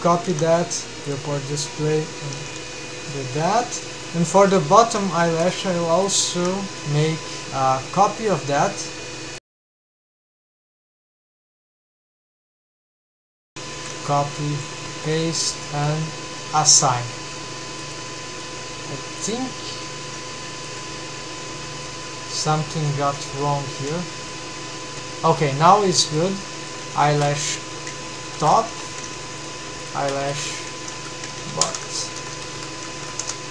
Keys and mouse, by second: 0.3 ctrl+c, 1.1 click, 2.4 ctrl+v, 3.1 middle drag, 3.9 middle click, 4.4 3, 4.5 middle click, 5.5 alt+a, 8.0 click, 9.6 click, 10.9-11.5 drag, 13.8 ctrl+c, 15.0 ctrl+v, 15.9-16.4 middle drag, 18.4 middle click, 18.5 alt+a, 19.3 click, 20.3 3, 22.3 ctrl+c, 23.8 ctrl+v, 24.3-26.2 middle drag, 24.9 alt+a, 26.4 middle drag, 27.1-29.5 shift+drag, 27.1 shift+BackSpace, 29.6 click, 29.9-32.8 ctrl+drag, 30.5 Left, 31.3 BackSpace, 31.9 Left, 32.0 Left.